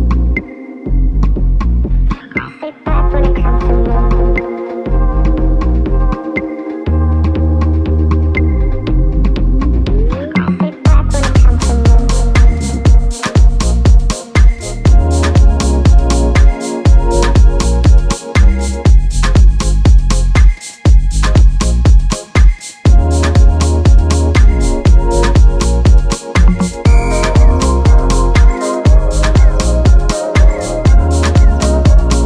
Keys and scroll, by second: 11.5 b.